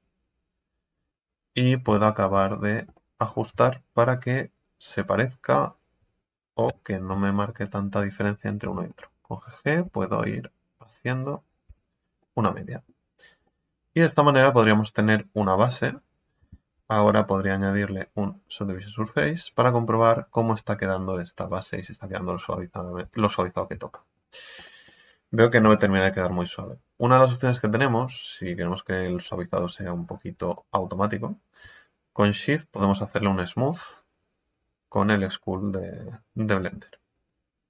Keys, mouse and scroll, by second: 1.2 scroll up 1, 2.9 middle click, 3.9-6.6 alt+shift+right drag, 6.6 KP_3, 8.6 g, 9.8 g, 11.4 scroll down 3, 11.7 Tab, 12.2-13.0 middle drag, 13.0 scroll down 3, 13.5-15.4 middle drag, 15.4-15.7 scroll up 4, 15.7-16.8 middle drag, 16.8-20.8 drag, 21.3 click, 22.1 middle click, 23.0 Tab, 23.3 scroll up 2, 23.9-25.6 shift+middle drag, 25.6 KP_1, 27.9 click.